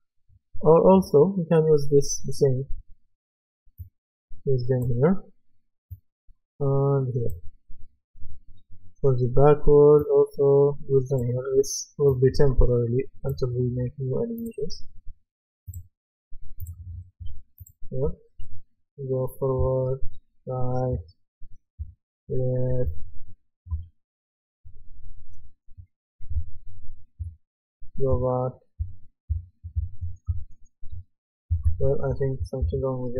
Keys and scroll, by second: 18.0 w, 19.6 d, 20.9 a, 22.9-24.2 typing, 26.3-32.1 typing.